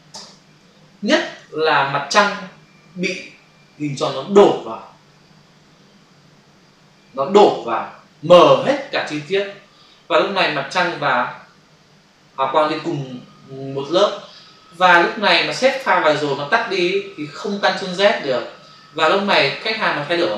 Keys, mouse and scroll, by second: 0.2 alt+BackSpace, 1.4 ctrl+d, 11.2 click.